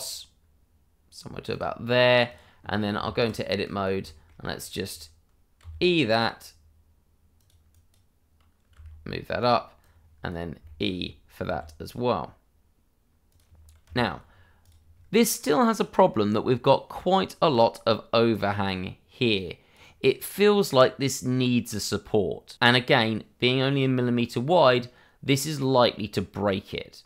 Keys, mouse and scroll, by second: 2.3 click, 3.0 Tab, 3.6 click, 4.1 middle click, 4.3 scroll up 1, 5.6 e, 7.3 click, 8.7 g, 9.3 click, 10.6 click, 10.6 shift+middle click, 11.4 e, 13.3 click, 13.8 Tab, 14.3 scroll down 1, 14.6 click, 16.3 scroll up 1, 17.5 click.